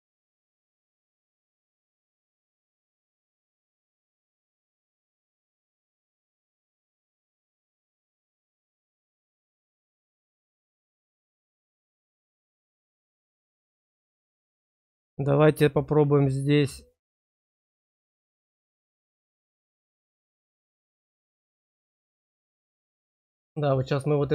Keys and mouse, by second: 0.4 shift+click, 0.6 shift+click, 1.6 shift+click, 1.8 shift+click, 4.2-5.4 drag, 5.5 click, 6.3 shift+click, 8.7 shift+click, 11.7 middle click, 12.3 middle click, 12.9 middle click, 13.5 click, 16.1 click, 21.3 click, 22.7 click.